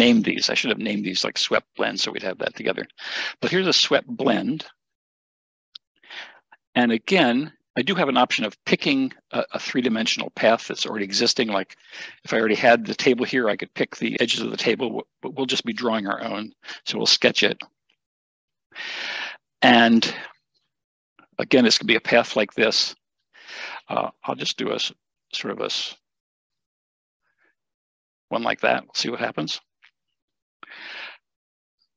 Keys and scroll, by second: 29.4 Escape.